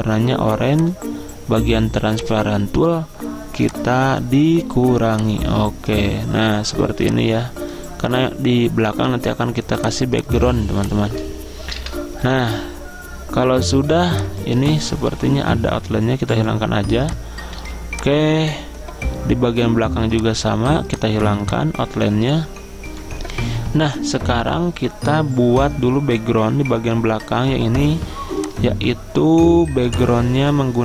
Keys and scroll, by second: 11.9 Delete, 14.8 ctrl+z, 17.7 z, 21.3 z.